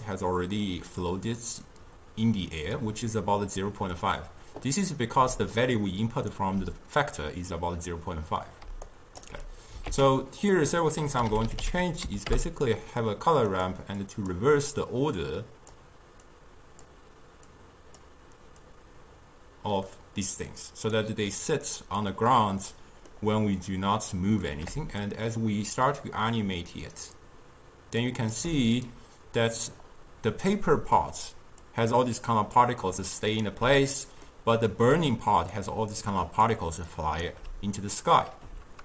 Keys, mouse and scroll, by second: 5.3 d, 5.6 click, 6.4 d, 6.5 d, 7.4 d, 8.7 d, 8.9 right click, 9.3 d, 9.9 ctrl+a, 14.1-21.7 drag, 22.4-25.1 middle drag, 25.1-28.2 shift+drag, 28.9-30.7 middle drag, 30.7-31.5 d, 31.7 click, 32.6-33.1 d, 33.6 d, 34.3-35.0 middle drag, 35.0 d, 35.4 d, 35.6 click, 36.5 d, 37.0 right click, 37.4 d.